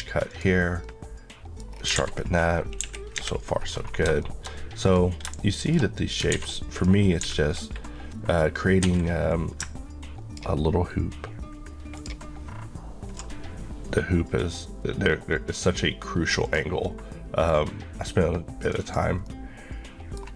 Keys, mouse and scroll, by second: 0.3 click, 0.9 middle click, 1.7-2.3 scroll down 2, 2.0 alt+a, 2.9 KP_1, 3.8 scroll, 3.8 scroll down 1, 4.3 middle click, 4.9 click, 5.4 middle click, 6.4 alt+a, 6.8 click, 8.9 Escape, 9.3 click, 18.7 click, 19.3 middle click.